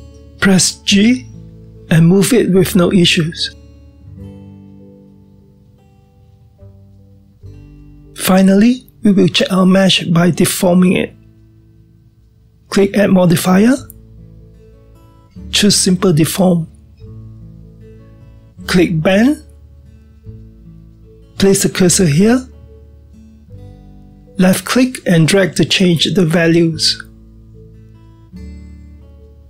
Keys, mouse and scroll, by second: 0.7 g, 11.0-14.1 middle drag, 15.2 click, 17.5 click, 20.5 click, 25.5-28.6 drag.